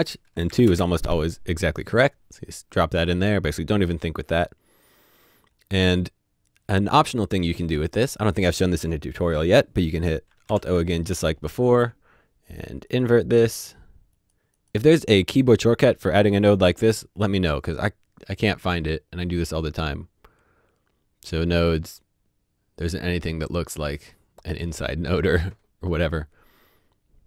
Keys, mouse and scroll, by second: 0.5 KP_2, 0.6 KP_Enter, 10.2 KP_Enter, 11.0 KP_Enter, 12.4 click, 18.3 click.